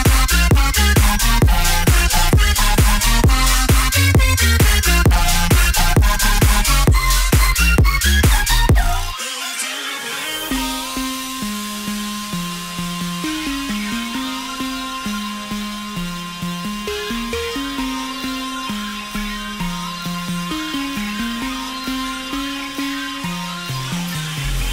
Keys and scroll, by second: 20.9-22.4 typing.